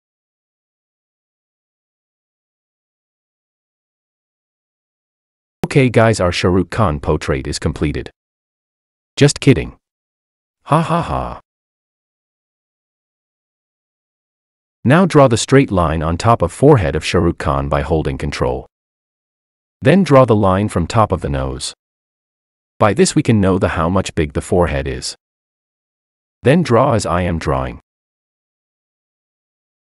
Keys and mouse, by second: 5.8-9.4 drag, 9.4 ctrl+z, 10.1 ctrl+z.